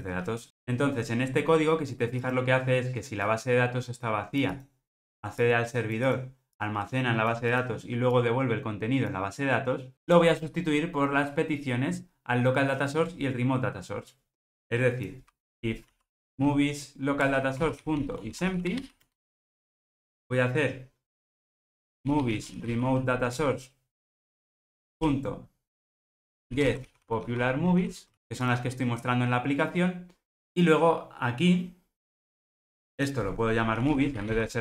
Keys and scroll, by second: 17.3 Return, 23.4 Return.